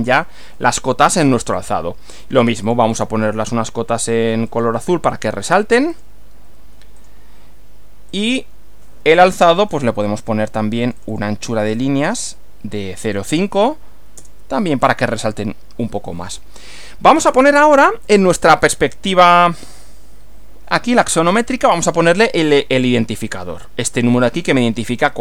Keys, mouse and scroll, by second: 1.6-2.4 drag, 2.7 click, 4.5 click, 5.9 click, 7.0 click, 8.2 click, 9.1-9.9 drag, 10.9 click, 11.6 click, 13.0-14.0 typing, 14.1 Return, 22.9 click.